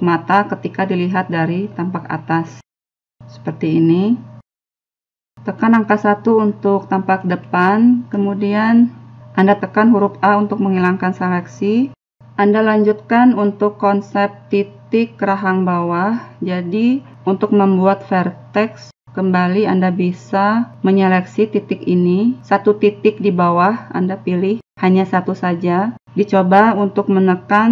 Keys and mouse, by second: 2.2 middle click, 2.3 click, 2.3 KP_1, 3.7-9.0 middle drag, 9.0 a, 19.7-21.7 right drag, 21.7-25.1 middle drag.